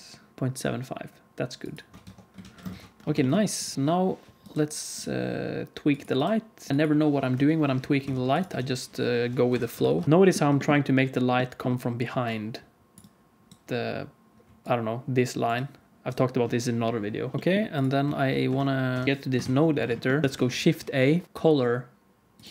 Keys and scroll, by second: 2.0 Tab, 2.4 alt+a, 2.7 ctrl+s, 7.2 KP_1, 8.0 shift+d, 8.5 alt+r, 9.4 r, 10.0 g, 12.0-14.3 typing, 16.0 d, 17.3 alt+a, 17.3 ctrl+s, 18.4 shift+F3, 18.8 shift+F3, 19.0 shift+F3, 19.4 ctrl+s, 20.2 shift+a.